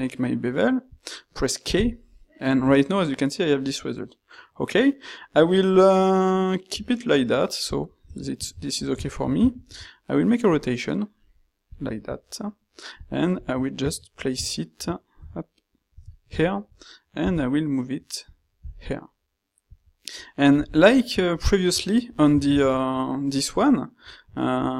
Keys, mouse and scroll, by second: 7.4 q, 9.5 ctrl+shift+q, 13.5 q, 17.2 g, 18.8 s, 20.6 g.